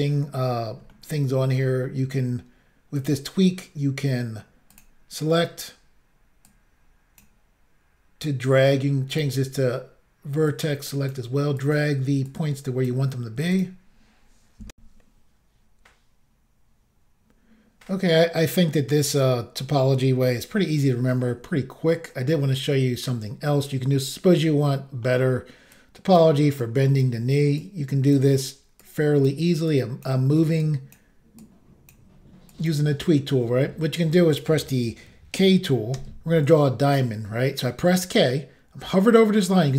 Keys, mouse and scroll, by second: 0.9 ctrl+middle click, 3.0 click, 3.1 click, 4.7 click, 4.8 click, 6.5 click, 9.1 click, 9.2 click, 10.5 click, 11.6 click, 11.7 click, 12.2 click, 13.5 click, 13.6 click, 14.7 Insert, 20.6 shift+middle click, 21.8-22.5 scroll up 2, 22.5-22.9 scroll up 1, 24.5 middle click, 25.8 click, 26.6 click, 27.6 click, 28.8 click, 29.7 click, 30.6 click, 31.4 click, 32.5 click, 32.7 click, 36.0 k.